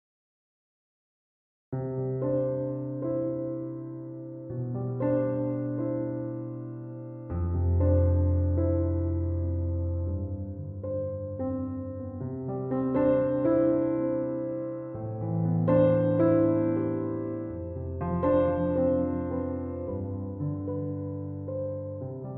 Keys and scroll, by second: 16.7-17.6 typing.